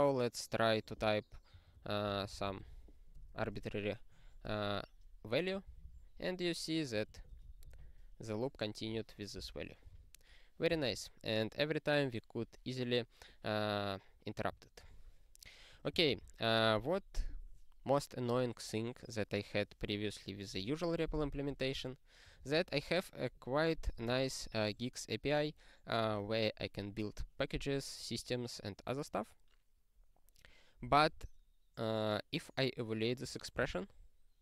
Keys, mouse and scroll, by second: 4.4 BackSpace, 5.8 ctrl+b, 7.1 ctrl+a, 7.3 ctrl+space, 7.4 ctrl+n, 9.4 ctrl+g, 9.9 super+o, 10.7 click, 12.2-12.7 scroll down 1, 12.7-14.8 scroll, 14.8 click, 16.1 alt+>, 21.2 ctrl+p, 21.5 ctrl+p, 22.4 ctrl+p, 24.4 ctrl+n, 33.7 ctrl+e.